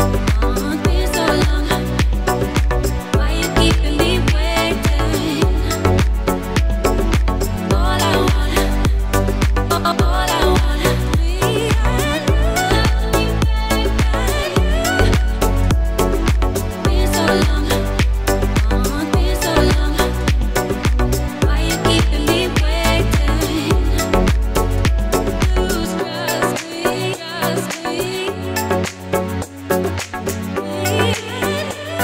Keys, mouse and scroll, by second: 0.9 click, 2.5-2.8 alt+scroll down 2, 2.8 right click, 3.2 click, 4.5 alt+right click, 6.3 click, 8.1 alt+right click, 9.4 alt+right click, 10.3 click, 11.4 ctrl+z, 11.9-12.5 alt+scroll up 2, 12.6-13.0 alt+scroll down 2, 13.5 click, 18.3 alt+scroll down 2, 18.7 scroll up 1, 19.2 click, 24.2 ctrl+z, 25.1 click, 29.0-29.7 alt+scroll down 2, 29.7 click, 31.1-31.5 alt+scroll up 2, 31.6-32.0 alt+scroll down 2.